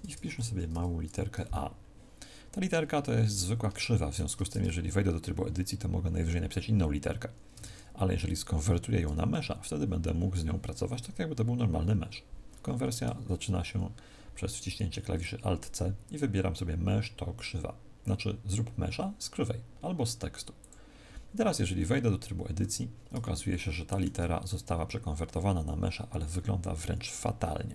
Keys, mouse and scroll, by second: 0.3 a, 0.6 Tab, 2.6-3.2 scroll up 1, 3.2-3.7 scroll up 6, 3.7 shift+middle click, 3.7-4.4 scroll up 1, 4.4 Tab, 7.5 Tab, 12.9 alt+c, 21.7-22.1 scroll up 1, 22.5 Tab, 22.5-23.4 scroll up 4, 23.4 shift+middle click, 24.1-24.5 scroll up 2.